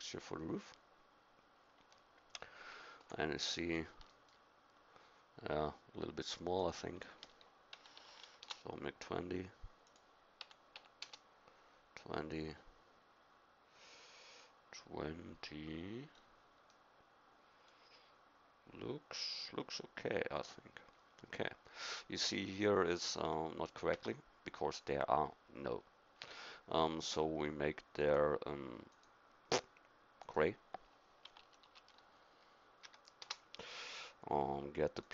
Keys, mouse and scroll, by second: 3.0 KP_1, 6.6-8.5 drag, 9.9 click, 12.7-20.3 middle drag, 23.9 Tab, 28.1-34.4 drag.